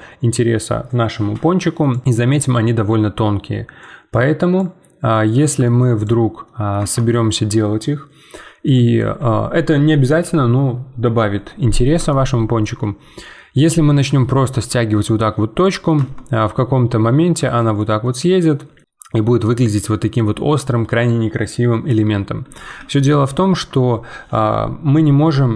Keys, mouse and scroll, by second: 5.1 middle click, 5.9 click, 6.4 middle click, 6.8 Tab, 8.6-11.7 drag, 12.1 shift+middle click, 12.8-13.2 scroll up 2, 13.2 middle click, 14.1 g, 16.0 Tab, 16.3-22.8 middle drag, 22.8 ctrl+z, 23.3 ctrl+z.